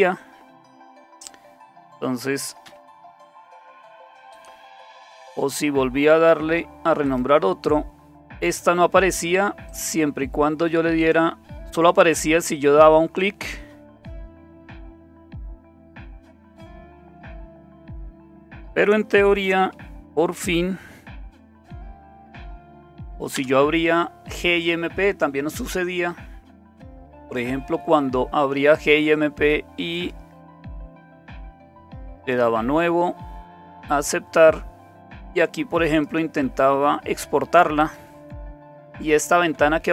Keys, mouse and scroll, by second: 2.2-3.9 typing, 3.6 click, 5.0 right click, 7.1 click, 9.7 click, 11.0 click, 14.0 click, 15.7-16.2 typing, 16.5 Return, 18.0 click, 21.7 alt+super+d, 22.1-23.2 typing, 23.4 Return, 29.9 click, 30.7 click, 32.2 click, 33.7 click, 35.9 click, 36.8 click, 37.8 click.